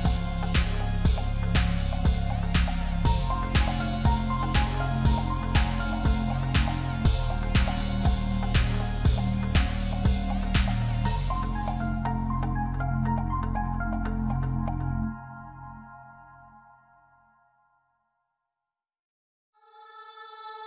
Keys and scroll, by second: 18.0 ctrl+-.